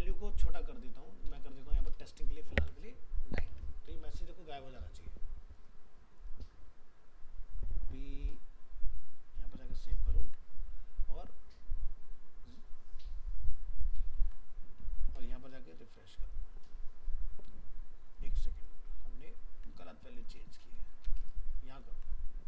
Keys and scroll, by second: 2.6 ctrl+s, 3.5 alt+Tab, 10.2 ctrl+s, 14.1 ctrl+s, 19.2 ctrl+z.